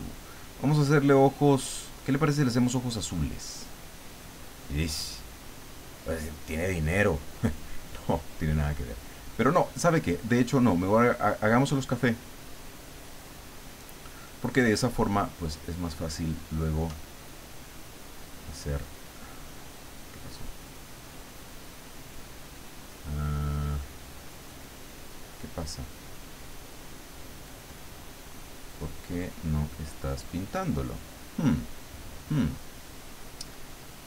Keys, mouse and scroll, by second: 10.5-14.1 drag, 14.5-16.9 drag, 18.2 click, 20.4-25.8 drag, 27.2-30.1 drag, 33.9-34.0 drag.